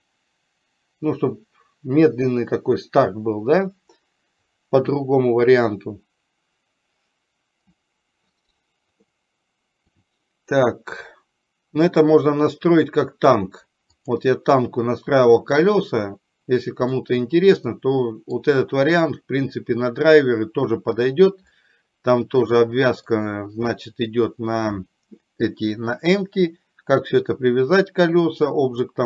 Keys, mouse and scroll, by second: 9.3 middle click, 14.1 click, 15.9-17.1 middle drag, 18.0 middle click, 21.6-23.4 middle drag.